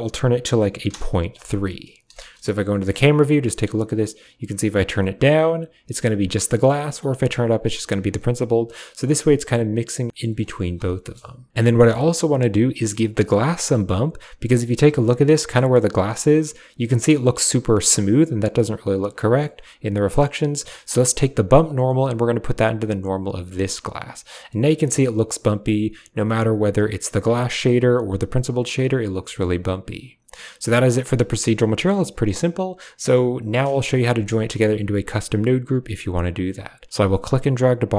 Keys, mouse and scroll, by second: 2.2 KP_0, 3.5-7.9 drag, 11.6 middle click, 12.9 click, 13.2 typing, 13.8 shift+middle click, 14.6 shift+middle click, 14.7 shift+click, 19.0-19.4 shift+drag, 20.3-20.6 drag, 21.4-23.5 drag, 24.7 shift+click, 25.6 click, 26.4-28.3 drag, 28.4 typing, 29.2 shift+click, 30.8 middle click, 32.3 click, 32.9 middle drag, 33.6 click, 33.8-34.4 typing, 35.5 drag, 36.9-37.9 drag.